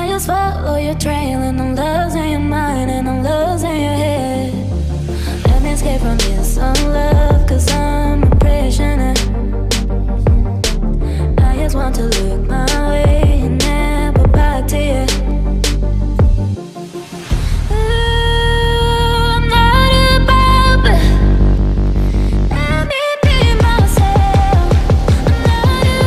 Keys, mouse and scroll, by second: 6.5 ctrl+z, 7.9 ctrl+click, 10.9 ctrl+click, 15.2 Delete, 15.6 Delete, 18.2 right click, 23.7-24.8 typing.